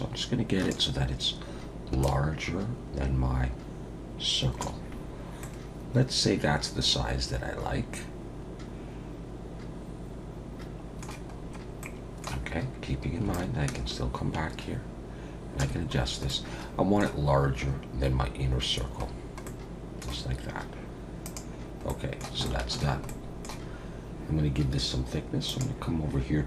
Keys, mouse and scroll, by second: 2.0 shift+click, 5.4 middle click, 11.4-11.8 scroll up 3, 11.8 middle click, 13.3 shift+click, 16.0-16.3 scroll down 2, 16.3 middle click, 19.1 scroll down 2, 19.5 middle click, 21.2 click, 21.9 middle click, 22.4 shift+middle click, 23.1 middle click, 23.7-24.3 scroll up 2, 25.5 click.